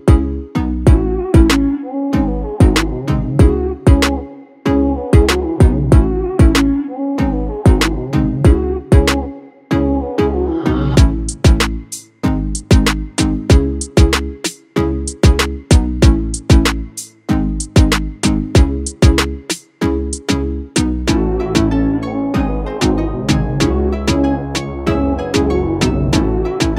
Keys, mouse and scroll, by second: 0.6 click, 2.1 click, 2.8 scroll down 2, 3.7 click, 4.3-7.4 middle drag, 7.4 click, 7.9 click, 8.6 r, 13.6-14.9 scroll down 5, 14.9 click, 15.3-16.8 scroll up 5, 16.8 g, 18.6 click, 22.2-22.7 middle drag, 22.7 scroll down 3, 23.7 click, 26.6-26.7 middle drag.